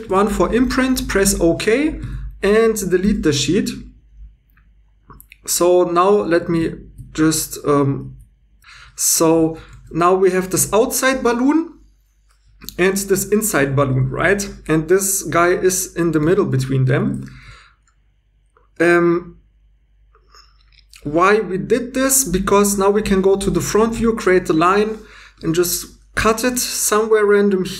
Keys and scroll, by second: 0.0 shift+1, 2.0 Tab, 3.0 h, 6.1 2, 8.0 super+x, 8.6 x, 9.7 Tab, 10.8 g, 10.9 g, 16.2 ctrl+z, 23.8 shift+a, 26.4 c.